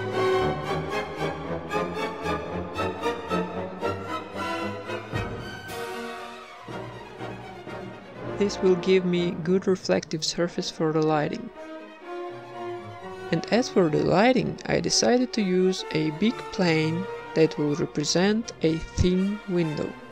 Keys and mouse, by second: 0.1 shift+a, 0.9 click, 1.5 click, 2.4 click, 2.6 shift+a, 3.2 click, 3.8 middle click, 4.4 click, 4.6 middle click, 4.8 a, 4.8 b, 4.8 g, 5.0 middle click, 5.6 click, 6.6 click, 6.9 click, 8.5 ctrl+s, 9.0 click, 9.2 KP_1, 9.3 shift+a, 10.4 r, 11.4 r, 11.8 s, 12.6 g, 13.4-14.6 middle drag, 14.4 s, 15.7-18.4 typing, 19.0-20.1 drag.